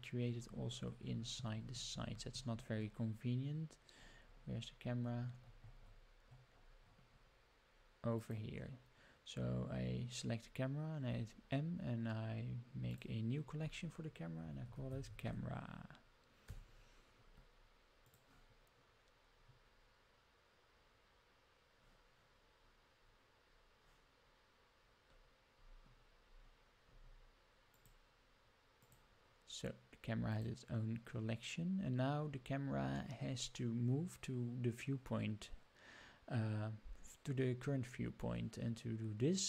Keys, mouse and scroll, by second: 0.2-1.9 scroll down 52, 1.9 scroll up 1, 2.1-3.7 scroll down 8, 3.7-6.6 scroll up 68, 6.8-7.4 scroll down 11, 8.1 click, 11.0 m, 25.5-26.9 scroll up 15, 27.7 click, 28.7 click, 30.3 click.